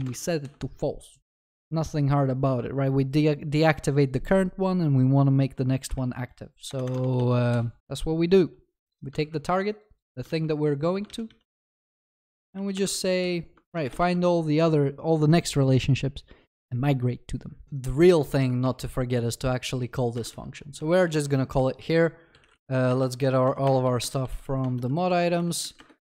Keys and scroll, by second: 0.1 Return, 0.1 ctrl+s, 6.0 ctrl+c, 7.0 ctrl+v, 7.2 ctrl+s, 7.8 ctrl+y, 7.9 ctrl+s, 10.2 ctrl+c, 10.3 ctrl+v, 13.6 ctrl+s, 13.8 ctrl+BackSpace, 14.0 ctrl+s, 18.7 ctrl+c, 20.3 ctrl+v, 22.9 Return.